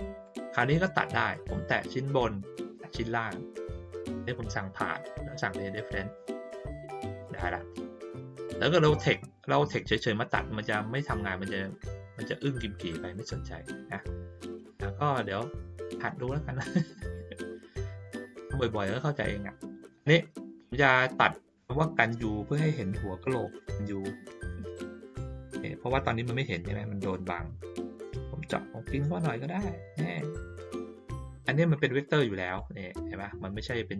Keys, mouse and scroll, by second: 0.2 click, 1.0 click, 2.6 shift+click, 4.3 click, 6.3 click, 7.7-8.3 drag, 13.6 middle click, 14.3 ctrl+middle click, 15.5 middle click, 17.0 ctrl+middle click, 18.0 ctrl+middle click, 19.4 ctrl+middle click, 20.8 ctrl+middle click, 21.5 click, 23.0-25.0 drag, 25.9-30.1 drag, 32.4 click.